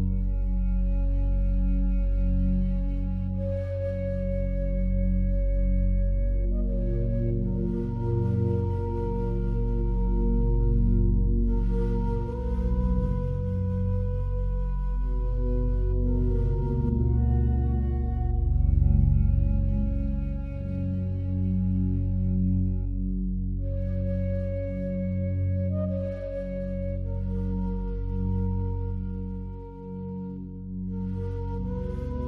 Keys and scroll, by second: 2.1 ctrl+z.